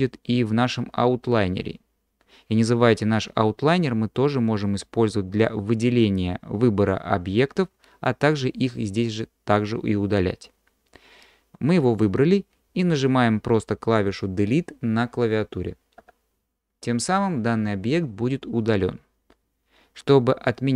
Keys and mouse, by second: 16.0 Delete.